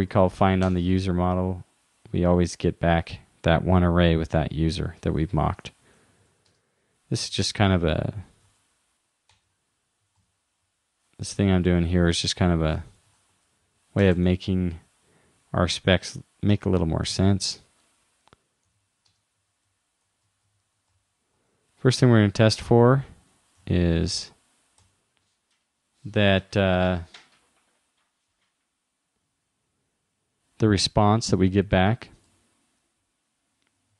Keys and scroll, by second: 7.8 shift+-, 12.5 shift+;, 23.6 shift+-.